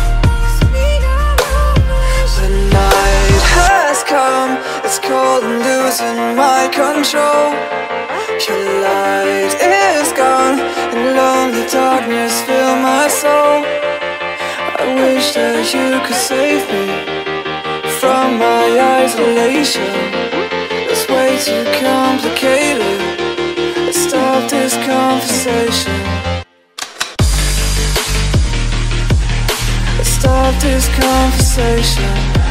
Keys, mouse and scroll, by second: 0.2 click, 1.1 click, 3.1 click, 3.2 click, 6.9 click, 7.5 alt+Tab, 8.9 click, 10.3 click, 10.4 alt+Tab, 11.6-13.8 typing, 13.5 Tab, 14.2 Tab, 14.7 Tab, 18.0 click, 18.6 click, 19.8 click, 21.5 click, 22.2 click, 23.4 click, 23.8-24.8 typing, 25.7 click, 26.1 click, 26.6-27.5 typing, 29.9 click, 30.7 click, 31.9 click.